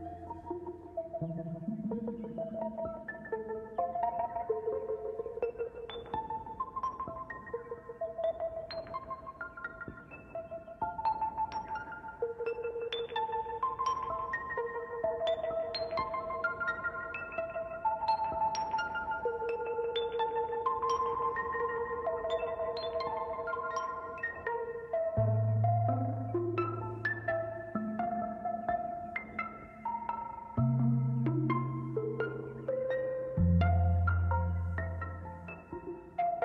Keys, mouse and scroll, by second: 1.8 click, 2.7 click, 3.1-4.9 middle drag, 4.9 scroll up 4, 5.6-7.5 drag, 8.5 click, 9.1 click, 11.8-12.4 scroll up 4, 12.4-13.9 shift+drag, 16.0 KP_0, 16.4-16.9 scroll down 13, 18.3 scroll up 1, 20.3-22.0 shift+drag, 25.5-26.3 middle drag, 26.3 shift+a.